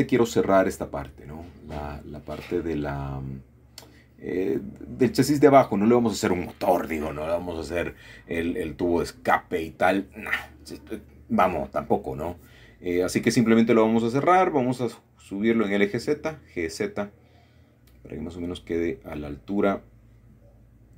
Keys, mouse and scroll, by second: 0.0 typing, 1.5 alt+shift+click, 2.2 click, 3.5-4.6 shift+drag, 4.6 shift+middle click, 5.3 shift+middle click, 6.8 shift+middle click, 7.6 typing, 10.5 click, 11.9-14.0 middle drag, 14.8-15.4 typing, 17.5 click, 18.2-19.8 middle drag.